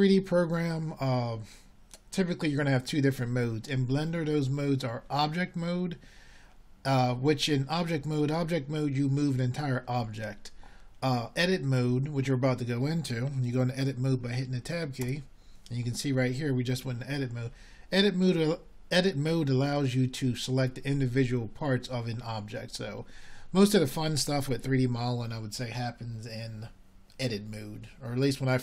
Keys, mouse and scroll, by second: 16.4 Tab.